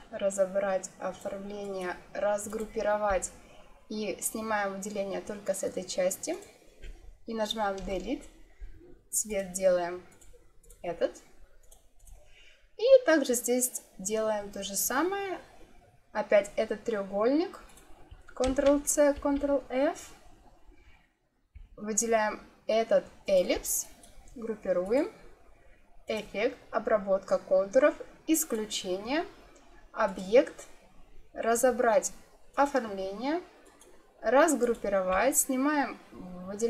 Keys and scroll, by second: 7.7 Delete, 18.4 ctrl+c, 19.1 ctrl+f.